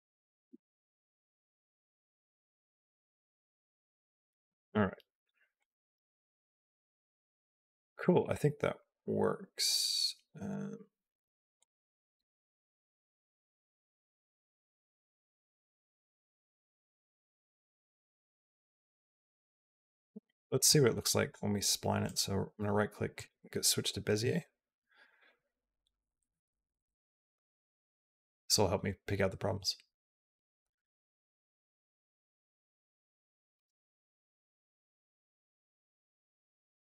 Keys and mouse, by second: 4.6 click, 4.6 space, 5.4-7.7 drag, 7.8 click, 8.6 click, 9.9 a, 11.4-19.8 drag, 20.5 click, 22.0-23.1 right drag, 24.9 space, 33.6 space, 34.1-36.8 drag.